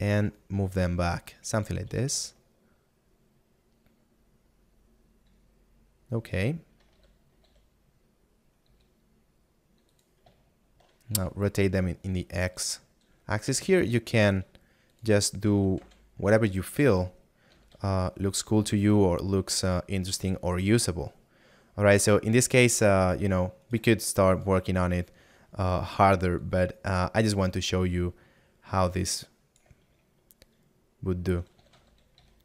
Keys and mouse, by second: 2.8 middle click, 7.0 shift+a, 18.7 click, 19.3 middle click, 24.3 right click, 24.9 shift+right click, 25.4 shift+middle click, 26.8 click, 30.1 middle click.